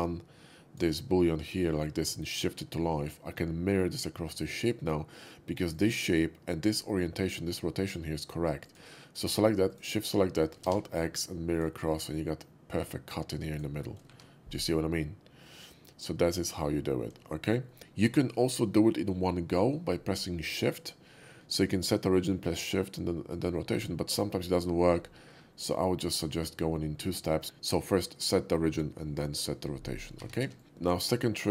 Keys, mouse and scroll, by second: 2.3 shift+click, 5.7 shift+click, 8.5 click, 9.7 shift+click, 10.6 alt+x, 11.5 click, 13.5 click, 14.2 shift+2, 15.1-16.6 middle drag, 17.0 middle click, 17.3 middle drag, 17.7 middle click, 25.5-26.1 middle drag, 26.4 middle click, 30.2 a, 30.4 x, 30.6 click.